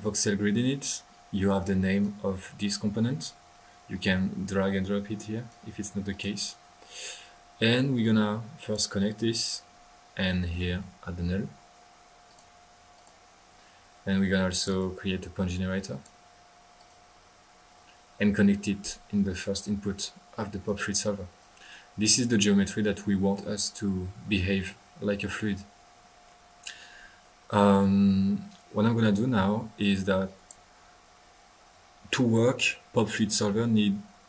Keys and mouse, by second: 1.5-2.3 drag, 3.9-5.7 drag, 6.1 click, 7.9-8.8 drag, 10.5 right click, 10.5-11.7 typing, 12.3 drag, 12.9 drag, 14.5 click, 15.0-15.8 drag, 15.9 click, 20.5-20.8 drag, 21.0 click, 21.6 drag, 22.3-23.4 middle drag, 23.7-24.4 typing, 23.9 middle drag, 30.2 click, 31.2 middle click.